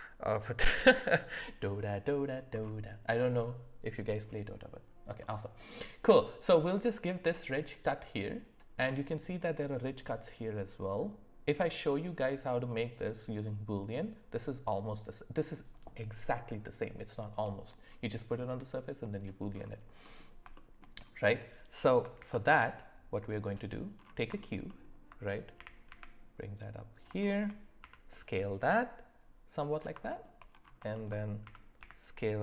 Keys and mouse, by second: 5.2 middle click, 20.0 middle click, 20.5 shift+middle drag, 22.1 shift+a, 24.7 alt+middle click, 25.5 g, 27.3 shift+middle click, 30.9 shift+middle click, 31.4 s.